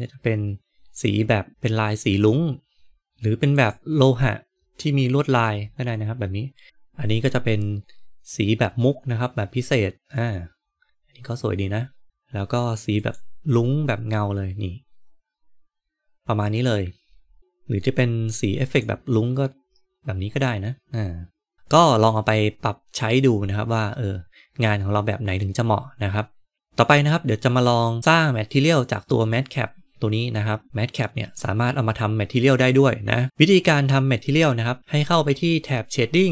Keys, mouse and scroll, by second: 3.0 click, 12.0-13.4 drag, 17.3 click.